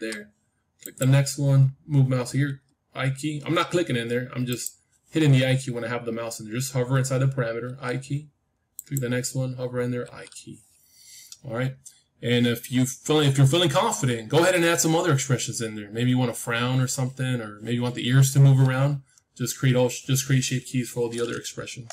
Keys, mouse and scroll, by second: 0.8-3.2 drag, 2.4 i, 4.4-6.4 drag, 7.6 i, 8.7-10.7 drag, 9.9 i, 10.9-13.0 middle drag.